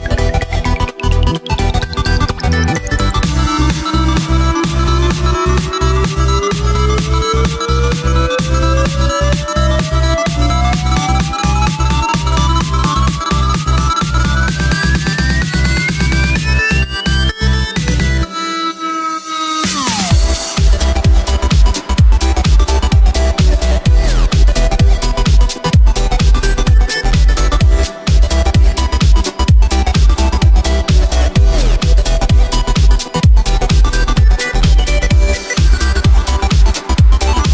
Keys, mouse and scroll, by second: 0.0-1.5 middle drag, 1.5 KP_3, 3.5 Tab, 4.2-9.0 drag, 9.9 shift+right click, 10.6 shift+right click, 12.0 g, 14.3-17.2 middle drag, 17.2 click, 17.5 Tab, 17.7 scroll down 3, 17.9 right click, 18.2-18.7 middle drag, 18.7 right click, 18.9 w, 21.0-22.5 middle drag, 22.5-23.3 scroll up 1, 23.3-24.1 scroll up 1, 24.1 right click, 24.6-25.4 scroll up 1, 25.4 g, 27.5 scroll up 1, 27.5-29.7 middle drag, 29.7 Tab, 29.9 right click, 30.7 3, 30.8 right click, 31.2-31.6 scroll down 1, 31.6 g, 33.9 Tab, 34.2-34.6 middle drag, 34.6 Tab, 35.1 right click, 36.2 g.